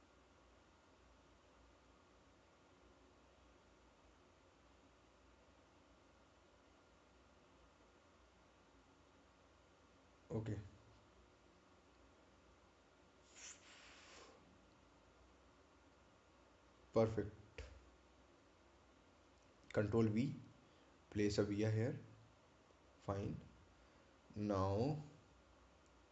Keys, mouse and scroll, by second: 9.3 click, 11.6 right click, 14.5 click, 18.5-19.0 scroll up 1, 19.9 click, 20.9 right click, 23.0 ctrl+v, 23.9 click.